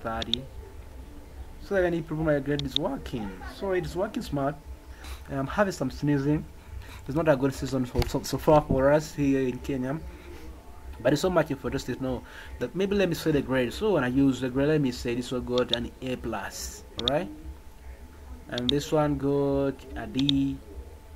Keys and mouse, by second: 0.3 click, 15.6 click, 16.9 click, 18.5 click, 20.1 click, 20.4 click.